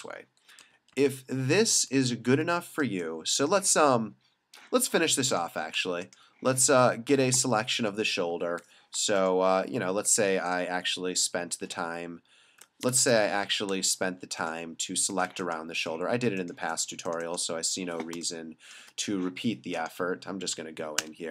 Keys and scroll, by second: 0.6 super+-, 1.9 super+0, 2.8 space, 8.3 l, 12.9 Escape, 18.2 space, 21.0 alt+BackSpace.